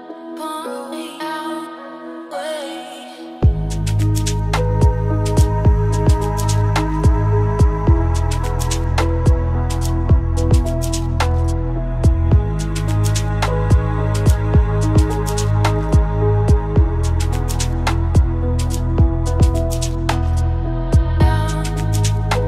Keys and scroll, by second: 13.0 ctrl+v, 16.6 ctrl+c.